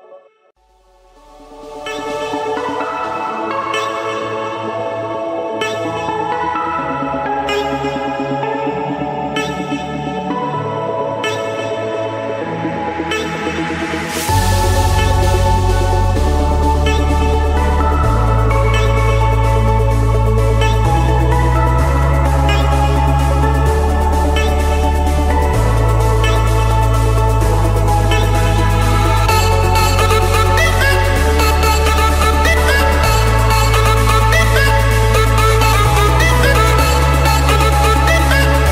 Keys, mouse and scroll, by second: 1.8 click, 2.1 Escape, 3.3 click, 5.4-6.5 drag, 7.2-7.6 typing, 8.8 Return, 10.8-11.9 drag, 12.3-12.8 typing, 14.0 Return, 15.4-16.1 typing, 17.1 Return, 18.1 Escape, 21.2 click, 22.2 click, 22.8-23.9 drag, 24.4-25.8 scroll, 25.8 Escape, 26.8-27.3 typing, 28.4 Return, 29.8 click, 30.4 Return, 31.3 click, 31.7 Return, 33.0 middle click, 33.1 middle click, 34.2 scroll up 3, 34.5 scroll down 1, 34.7 scroll, 35.4 Escape, 36.6 click, 38.0 click.